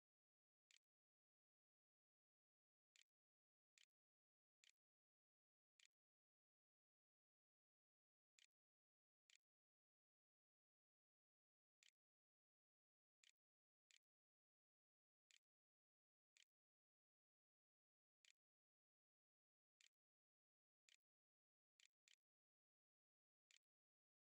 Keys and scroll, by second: 0.0-16.3 typing, 8.8 Return, 17.5-23.3 typing.